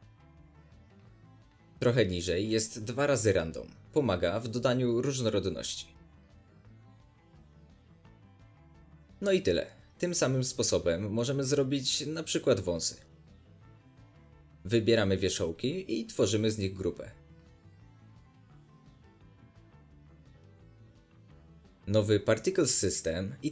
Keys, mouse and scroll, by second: 2.8-4.6 drag, 4.3-4.6 scroll up 2, 4.6-7.7 middle drag, 7.7-10.9 drag, 10.7 scroll down 2, 10.9-14.7 middle drag, 15.0-15.4 drag, 15.4-16.7 middle drag, 15.4-15.8 scroll up 2, 16.1 scroll up 1, 16.3 z, 16.7 click, 16.8 Tab, 16.8 shift+middle click, 17.1 scroll up 2, 17.3 click, 17.7 middle click, 18.0 z, 18.6 click, 19.5 click, 19.9 alt+a, 20.1 click, 20.4 Tab, 20.5-21.7 middle drag, 21.7 drag, 22.3 Return, 22.3-22.6 drag.